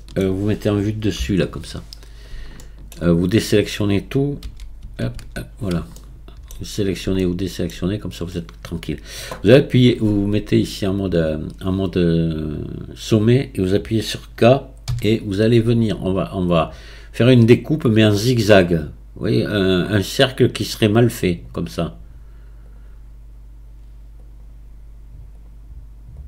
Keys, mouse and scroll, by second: 1.2 KP_7, 2.0-2.6 scroll up 6, 2.6 shift+middle click, 3.0-4.4 scroll down 2, 4.4 a, 4.8 a, 5.1 a, 6.0 shift+middle click, 6.8-7.2 scroll up 1, 7.2-8.8 shift+middle drag, 8.8-11.1 scroll down 1, 11.1-14.1 drag, 15.2 k.